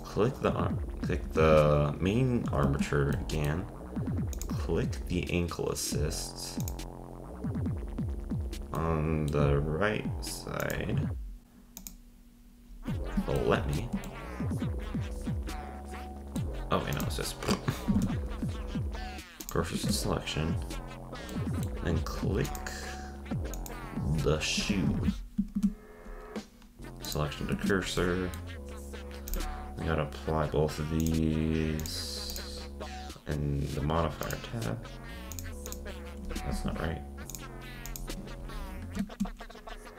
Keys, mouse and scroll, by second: 2.6 ctrl+Tab, 3.1-4.3 middle drag, 4.3 click, 6.6 click, 8.8-10.6 middle drag, 10.6 click, 13.4-16.9 shift+middle drag, 16.9-17.4 drag, 17.9 shift+s, 19.7 ctrl+Tab, 20.7-21.3 scroll down 1, 21.3-22.4 middle drag, 22.4 click, 23.6 click, 24.7 ctrl+Tab, 25.6 shift+s, 27.6 ctrl+Tab, 28.0-29.3 middle drag, 29.3 click, 31.0-32.6 drag, 34.2 click, 35.3-36.4 drag, 36.6 z, 37.3-38.4 drag, 38.4 scroll down 5, 39.2-39.9 scroll up 4.